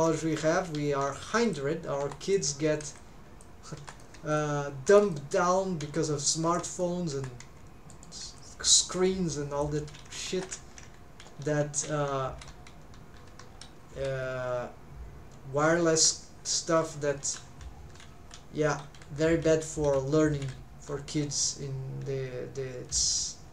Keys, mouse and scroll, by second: 5.8 Escape, 7.4 Escape, 8.2 Escape, 9.7 click.